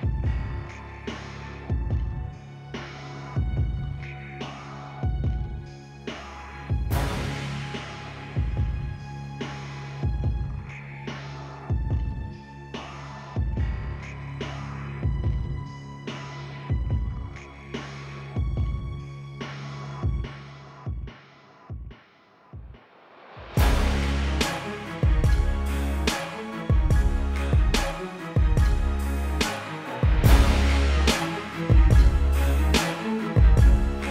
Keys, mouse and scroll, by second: 4.9 Return, 5.4 ctrl+-, 6.4 ctrl+z, 7.4 ctrl+z, 8.8 ctrl+KP_0, 10.4 click, 12.2 Return, 12.7 ctrl+shift+], 13.6 click, 18.3 click, 19.2 KP_Enter, 20.2 ctrl+u, 21.0 click, 30.0 b, 31.1 click.